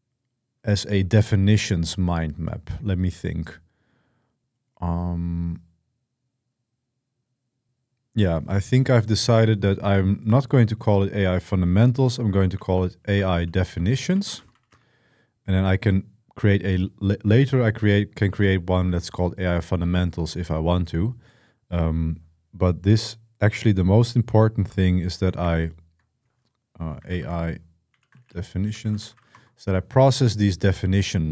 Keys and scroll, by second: 12.1-15.0 typing, 25.2 F2, 26.6-29.5 typing.